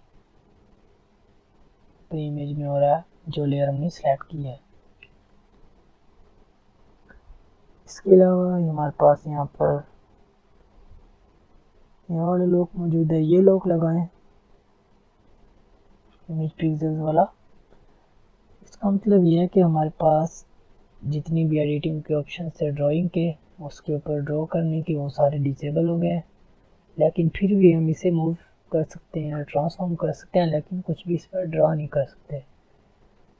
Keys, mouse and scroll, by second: 0.1 click, 2.5 ctrl+z, 3.3 ctrl+alt+z, 4.7 ctrl+alt+z, 6.2 click, 10.9 click, 13.3 click, 13.4 click, 26.3-32.7 drag, 31.4 typing.